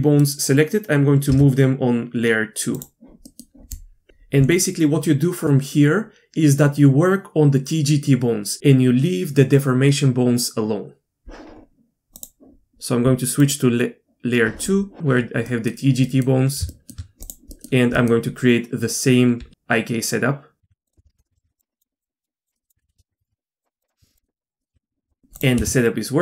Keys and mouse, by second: 2.1 m, 13.4-14.5 drag, 15.7-17.3 middle drag, 17.3 click, 20.2 e, 21.0 alt+p, 21.3 Tab, 21.4 ctrl+shift+c, 21.8 click, 22.7 Tab, 22.9 alt+p, 23.1 Tab, 23.6 ctrl+shift+c, 23.8 click, 24.0-24.4 shift+middle drag, 24.7 g, 25.3 click, 25.6 g.